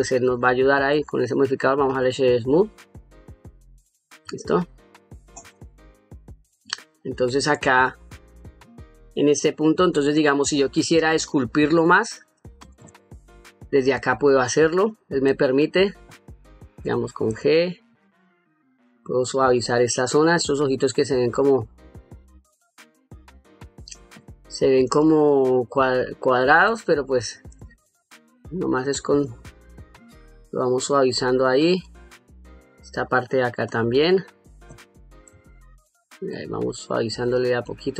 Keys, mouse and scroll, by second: 0.6-2.3 right drag, 3.2-3.7 middle drag, 4.1-4.9 ctrl+middle drag, 5.8-6.1 middle drag, 6.4-6.9 shift+middle drag, 13.6 middle click, 14.6 middle click, 16.5 g, 17.2-26.2 shift+drag, 26.6 middle click, 27.6-31.3 shift+drag, 31.5 shift+click, 32.0 shift+click, 32.8 shift+click, 33.4 shift+click, 33.9 shift+click, 34.5 middle click, 35.5 shift+click, 36.0 shift+click, 36.8 shift+click, 37.3 shift+click.